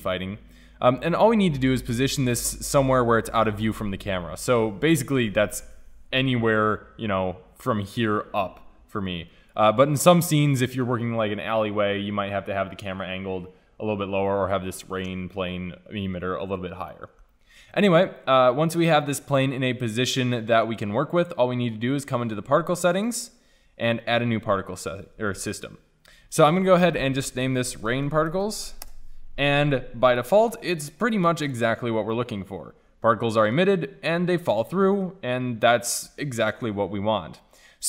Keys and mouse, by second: 0.7-2.5 drag, 3.0 click, 4.6 KP_0, 6.1 g, 9.7-11.4 drag, 11.4 middle click, 17.0 middle click, 17.2 middle click, 20.5-23.0 middle drag, 23.0-25.9 drag, 26.4-28.3 drag, 30.2-34.1 drag, 34.1-34.5 middle drag, 34.5-34.9 drag.